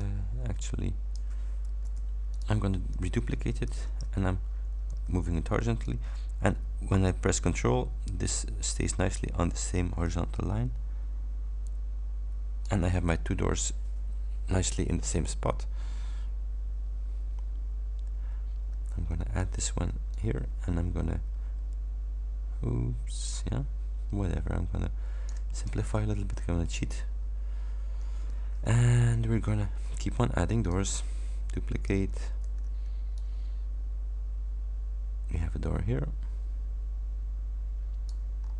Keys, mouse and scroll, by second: 0.0-1.4 drag, 2.0 Delete, 2.4 click, 3.7 ctrl+d, 4.9 ctrl+h, 5.9-12.9 ctrl+drag, 19.5 ctrl+d, 20.2-25.6 ctrl+drag, 25.8 ctrl+click, 26.7 scroll up 1, 29.0-30.1 shift+scroll up 6, 30.7 click, 32.5 ctrl+d, 33.2-38.4 drag, 38.4-38.5 scroll up 2.